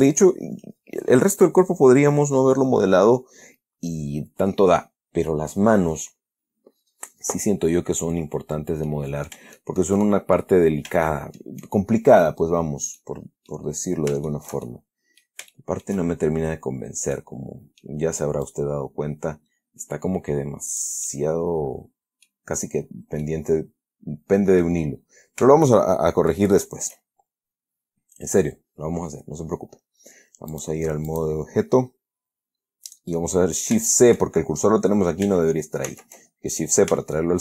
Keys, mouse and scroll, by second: 8.6 scroll down 2, 9.2-9.8 middle drag, 9.9-10.3 shift+middle drag, 10.3-10.9 shift+scroll down 4, 10.4 shift+middle click, 10.9 shift+scroll up 2, 11.4-11.9 shift+middle drag, 13.3-14.0 middle drag, 14.6-15.7 shift+middle drag, 15.8-16.3 shift+middle drag, 17.5-18.3 middle drag, 18.8-21.3 drag, 21.3-22.8 middle drag, 23.5-25.1 middle drag, 25.5 scroll down 1, 26.1 shift+middle click, 26.2 shift+scroll down 1, 26.4 shift+middle click, 26.7 shift+scroll up 1, 26.9 shift+middle click, 30.8 click, 31.4 click, 32.8-33.1 scroll down 2, 36.2 shift+c, 37.0-37.4 scroll up 3.